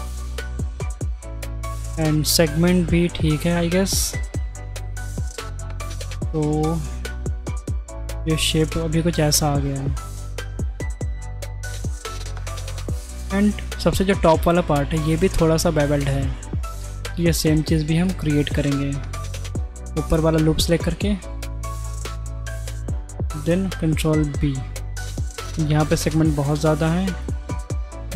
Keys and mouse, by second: 0.8-1.3 middle drag, 1.8 middle click, 2.2-2.6 shift+middle drag, 3.1 middle click, 4.5-4.9 middle drag, 5.3 shift+middle click, 6.0-6.3 middle drag, 6.4 Tab, 6.8 right drag, 6.9-9.3 middle drag, 11.2 click, 13.8 drag, 13.8 right drag, 17.0 Tab, 17.1 middle click, 17.8 2, 18.0 alt+click, 19.0 middle click, 20.5-20.9 shift+middle drag, 21.7 ctrl+b, 26.4 click, 27.2 click.